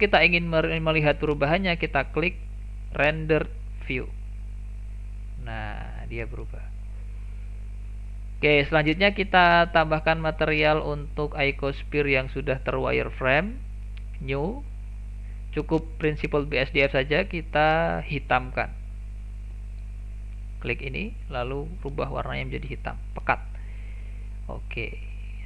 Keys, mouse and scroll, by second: 0.8-3.9 middle drag, 4.0 click, 5.3-5.7 scroll down 1, 5.7-8.6 middle drag, 8.6-10.3 scroll up 2, 10.3 click, 13.8-16.8 drag, 17.2 click, 19.7 click, 20.6 click, 22.9 click, 23.6 middle click, 23.9-24.3 scroll down 2, 24.3-25.4 middle drag.